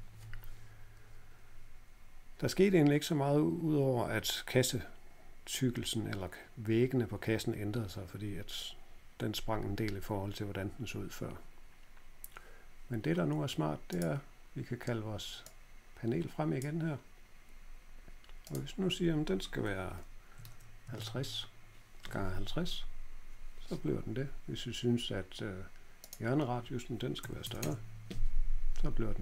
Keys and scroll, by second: 20.0-20.9 typing, 26.9-27.7 typing.